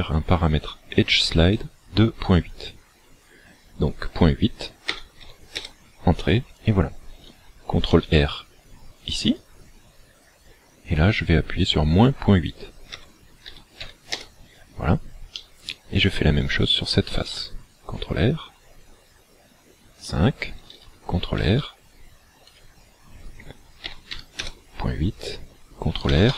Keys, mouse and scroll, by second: 7.9 ctrl+r, 15.4 middle click, 17.3 ctrl+r, 20.1 click, 21.4 ctrl+r, 26.1 ctrl+r.